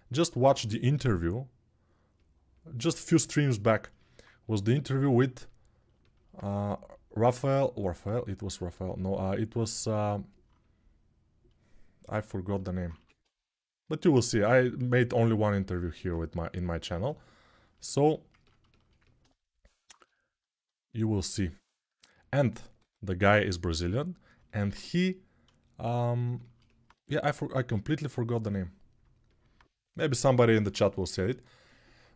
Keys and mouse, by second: 0.7 g, 3.6-32.1 alt+drag, 12.7 1, 19.7 2, 22.5 1.